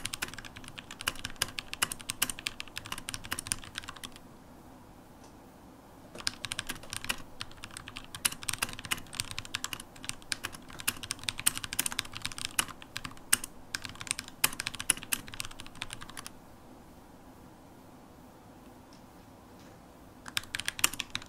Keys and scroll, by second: 0.3 shift+super+x, 5.1 super+q, 6.0 ctrl+shift+space, 6.0-6.9 typing, 10.6 super+h, 12.4 shift+super+x, 13.8 shift+super+x, 14.5 super+h, 15.8 shift+super+x, 17.1 super+h, 20.6-21.2 typing.